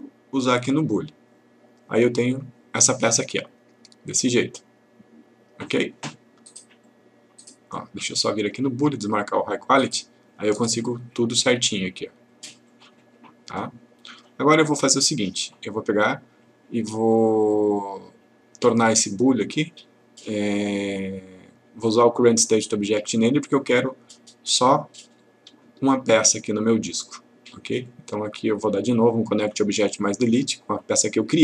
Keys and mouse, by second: 6.9-7.8 click, 12.7-14.2 click, 19.1 right click, 23.0 click, 25.9 shift+click, 27.8 right click, 30.4 click.